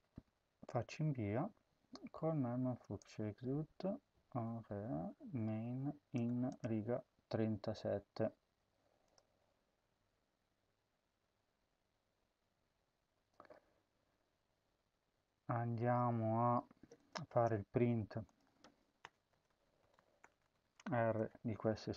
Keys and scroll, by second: 17.2 Return, 18.9 Return, 19.0-21.5 typing.